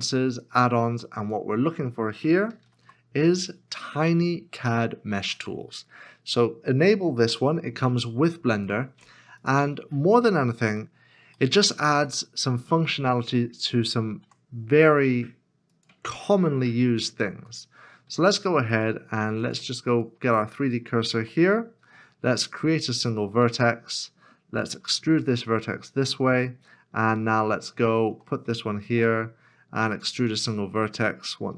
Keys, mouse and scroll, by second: 2.3-3.3 typing, 10.1 typing, 10.3 shift+middle click, 10.9-11.3 scroll, 11.6 shift+middle click, 18.7 Tab, 18.7 right click, 20.9 s, 21.0 shift+a, 24.6 e, 27.7 e, 27.9 shift+right click, 28.9 shift+a.